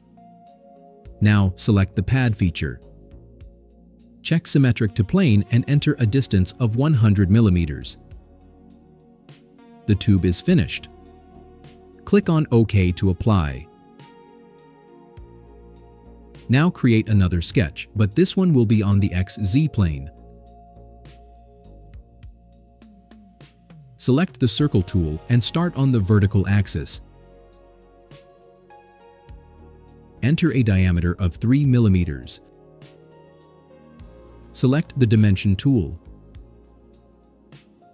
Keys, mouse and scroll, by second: 2.8 click, 4.6 click, 5.7 click, 7.7-9.1 typing, 9.4 click, 10.5 scroll down 2, 11.3 scroll down 1, 11.3 middle click, 11.6 right click, 14.2 click, 18.3 click, 21.0 click, 22.6 middle click, 22.9 scroll up 1, 26.8 click, 29.0 click, 31.6 3, 32.6 Return.